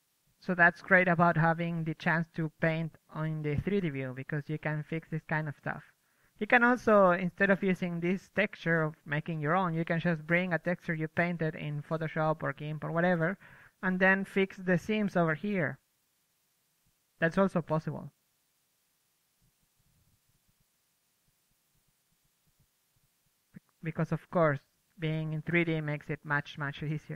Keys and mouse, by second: 1.2 middle click, 1.3-4.1 drag, 4.3 KP_1, 7.6 KP_2, 7.8 KP_3, 8.1 KP_1, 8.4-10.8 drag, 10.6-11.4 ctrl+z, 11.6 KP_3, 12.4-13.8 drag, 13.4 middle click, 13.9-17.3 drag, 14.6-16.8 middle drag, 17.1-21.1 middle drag, 20.5 KP_1, 21.1 KP_3, 21.6 Tab, 22.6 a, 22.8 a, 22.9 a, 23.6 l, 24.6 Tab, 25.6 m.